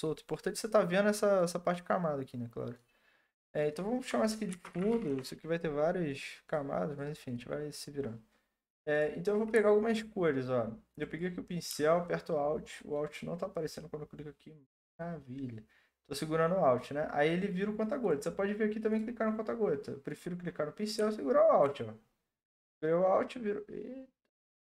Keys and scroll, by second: 4.3-5.4 typing, 6.0 Return.